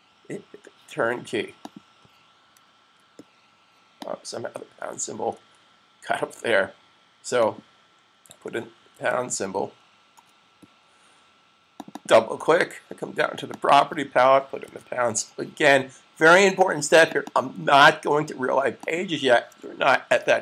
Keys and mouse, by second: 1.5 click, 2.3 super+click, 3.8 click, 5.3 super+z, 7.3 click, 8.6 shift+3, 11.6 click, 12.0 double click, 13.3 click, 13.3 shift+3, 17.1 click, 17.2 double click, 18.7 click.